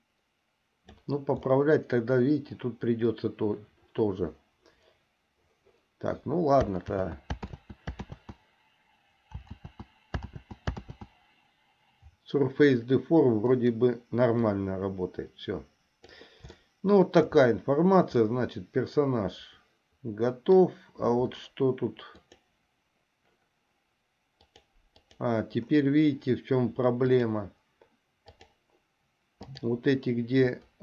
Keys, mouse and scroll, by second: 7.1 ctrl+z, 7.8 ctrl+z, 8.3 ctrl+z, 9.8 ctrl+z, 10.6 ctrl+z, 11.1 ctrl+z, 14.7-16.5 drag, 16.8 shift+middle click, 18.6-20.8 middle drag, 22.4 click, 24.5 click, 27.3-28.7 drag.